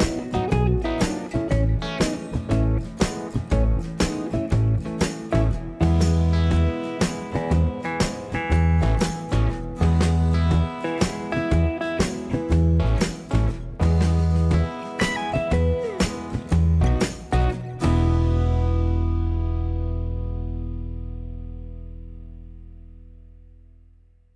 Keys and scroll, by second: 3.6 space, 3.6 Escape, 11.0 m, 11.6 space, 23.9 m.